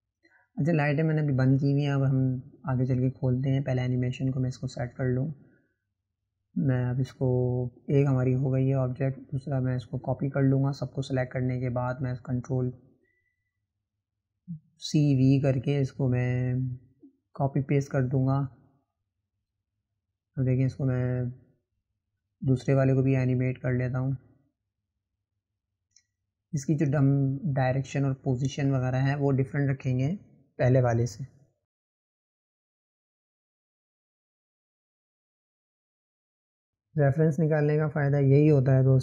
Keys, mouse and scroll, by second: 0.0-1.9 drag, 5.9 click, 6.4 click, 12.8 click, 14.6 ctrl+v, 17.4 click, 18.9 click, 19.2 click, 19.7 click, 20.0 Delete, 20.5-22.3 drag, 23.8-24.2 scroll up 2, 24.3-26.2 shift+middle drag, 26.2-27.1 drag, 34.7-35.7 drag.